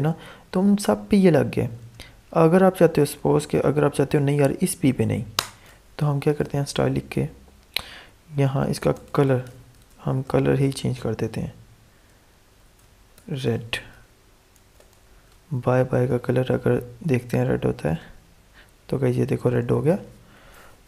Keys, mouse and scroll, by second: 5.3-6.8 typing, 8.6-9.9 typing, 10.2 Return, 12.3-13.9 typing, 14.5 ctrl+s, 14.9 alt+Tab, 17.8 click.